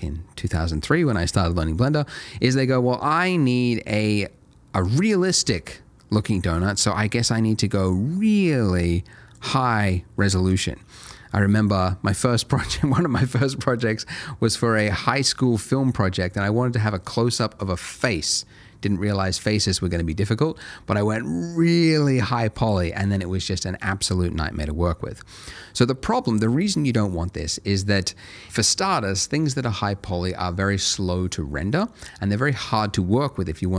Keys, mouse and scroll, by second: 2.3 click, 10.2 middle click.